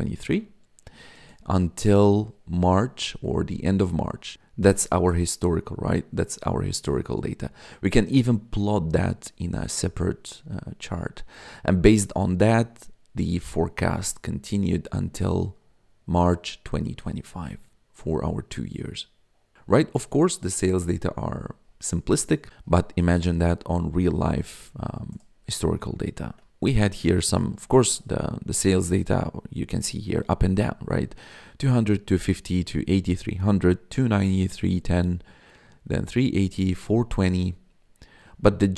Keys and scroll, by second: 26.1 ctrl+s.